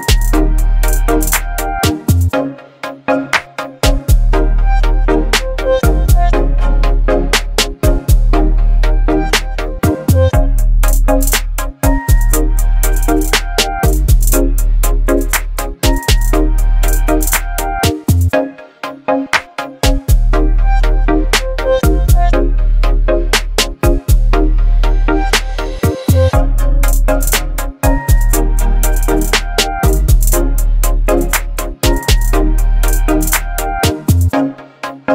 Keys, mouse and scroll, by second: 1.7-5.1 drag, 8.3-12.9 alt+drag, 13.4-15.9 alt+drag, 16.4-20.1 alt+drag, 23.1 click, 27.0 ctrl+g, 28.3 ctrl+0, 30.9 click, 32.6 right click, 34.2 click, 34.2 click.